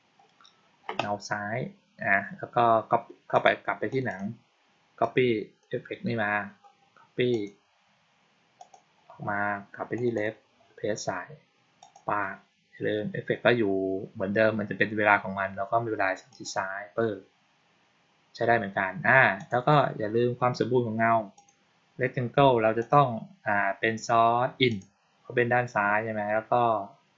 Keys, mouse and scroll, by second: 3.2 click, 3.8 click, 4.0 click, 4.9-5.5 drag, 7.2 click, 8.5 click, 9.8 click, 10.0 click, 11.7 click, 16.2 click, 19.3 click, 21.2 click, 22.7 click, 24.6 click.